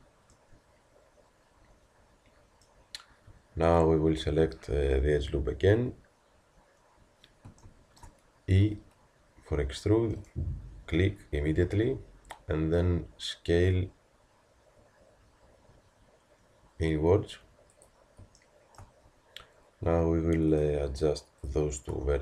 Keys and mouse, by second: 0.3 click, 1.6-3.7 drag, 5.7 KP_3, 8.7 e, 13.6 s, 18.6-20.6 middle drag, 20.6-22.2 drag.